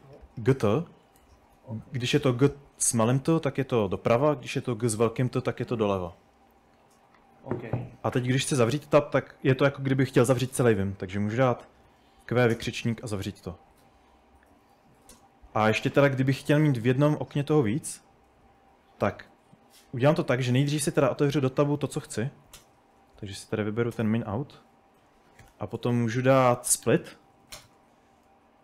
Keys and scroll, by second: 1.6 typing, 3.6-5.5 typing, 7.0-9.2 typing, 11.1-12.6 typing, 13.8-15.3 typing, 20.0-27.8 typing.